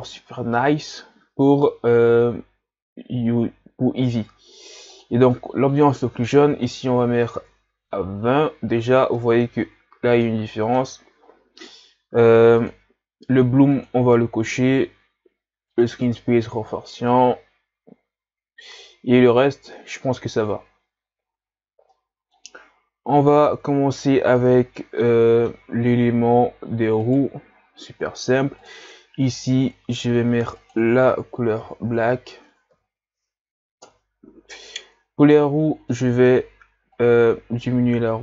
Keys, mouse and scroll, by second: 0.1 click, 7.4-9.2 drag, 9.2-9.8 middle drag, 9.8-10.3 scroll up 1, 10.3-14.0 middle drag, 14.0 click, 15.9 click, 22.1-22.8 middle drag, 22.8-23.5 scroll up 2, 23.5-24.8 ctrl+scroll down 5, 24.8-25.8 middle drag, 25.8-26.6 scroll up 2, 27.1 right click, 27.6-29.3 right drag, 29.3-33.9 drag, 37.1-38.2 drag.